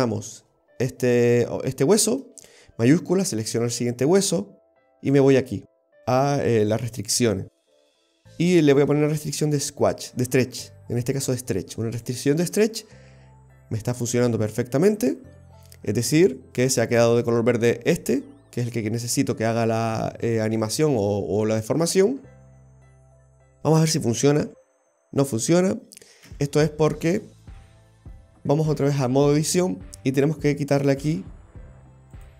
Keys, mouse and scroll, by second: 3.0 shift+right click, 5.3 click, 9.2 click, 23.0 right click, 24.5 g, 26.3 ctrl+z, 28.9 click, 30.8 click, 32.2 click.